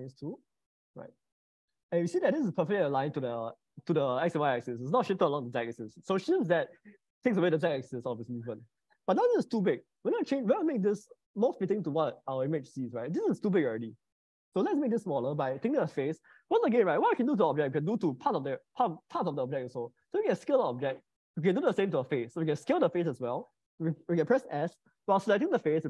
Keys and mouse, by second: 1.2-8.8 middle drag, 9.2 middle click, 11.4 click, 14.6 middle click, 23.2 middle click.